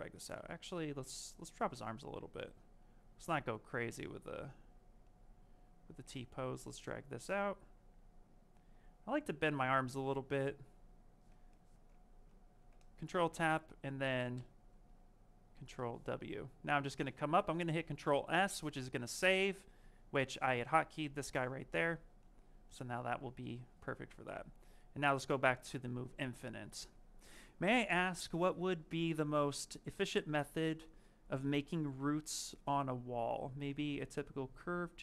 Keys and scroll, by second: 0.2 ctrl+z, 12.4 q, 17.5 ctrl+s.